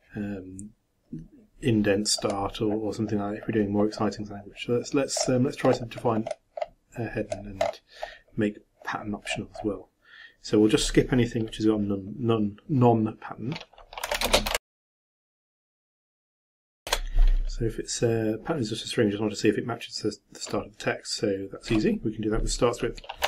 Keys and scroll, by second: 14.6-17.3 typing.